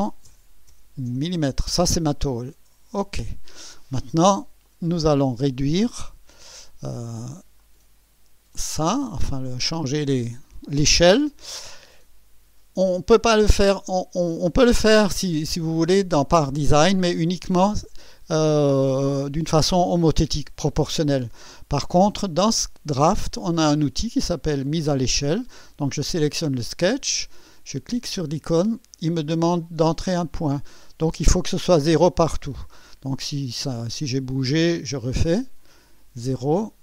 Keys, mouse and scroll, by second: 0.3 0, 1.1 Return, 3.2 click, 4.6 click, 7.6 click, 8.5 click, 27.9 click, 32.5 click, 35.2 click.